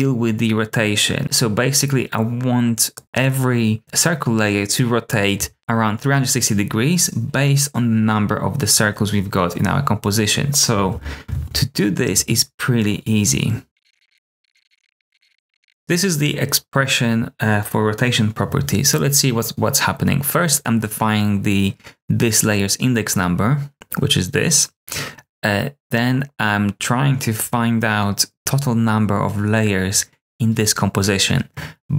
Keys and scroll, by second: 10.7 super+z, 11.2 super+z, 13.6-15.9 typing.